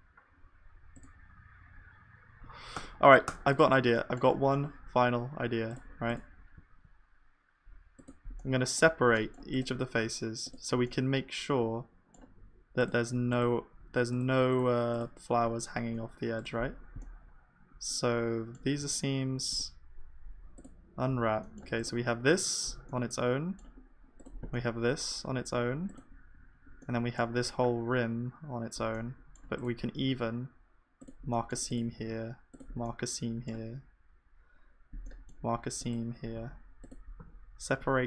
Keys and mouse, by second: 2.9 Tab, 3.2 Tab, 6.7 ctrl+e, 8.6-11.2 middle drag, 11.2-13.3 middle drag, 11.3 click, 11.3 right click, 13.3-17.6 drag, 13.3-17.6 right drag, 15.8 shift+e, 17.6-19.5 middle drag, 18.9 a, 19.5 u, 23.1-35.2 drag, 23.1-33.0 middle drag, 23.1 right click, 24.6-33.0 right drag, 30.1 ctrl+e, 36.4 ctrl+e, 37.2 a, 37.8 u.